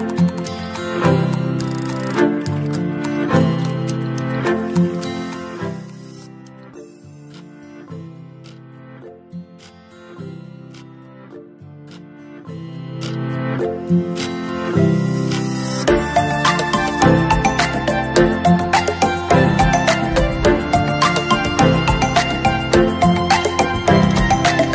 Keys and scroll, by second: 13.0 ctrl+=.